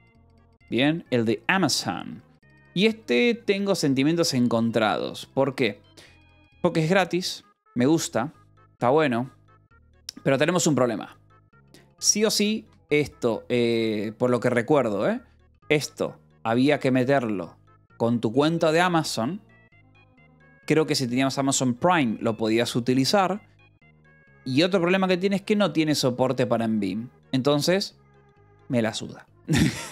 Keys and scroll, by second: 1.7-2.9 typing, 5.4 j, 8.2 ctrl+=, 11.0 ctrl+=, 11.6 j, 12.6 f, 14.3 a, 15.6 j, 16.9 k.